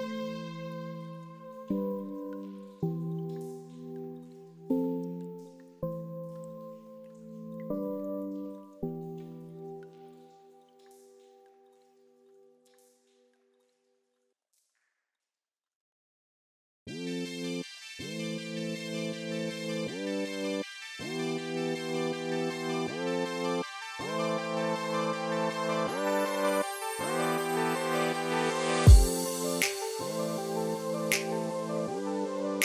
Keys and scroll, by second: 4.0 ctrl+a, 13.2 ctrl+x, 20.2 ctrl+v, 25.8 ctrl+x, 31.7 ctrl+v.